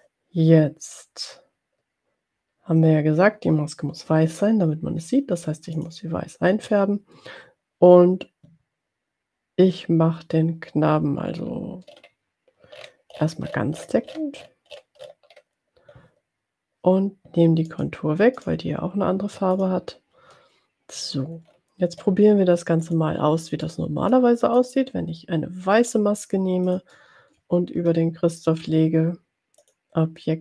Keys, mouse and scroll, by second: 5.9 click, 11.6 scroll down 2, 11.9-12.6 scroll up 2, 12.8-14.6 scroll up 6, 14.7-15.8 scroll up 4, 17.8 right click, 18.8 right click, 19.8 click, 23.0 click, 23.9 middle click, 26.9 shift+click, 29.9 click.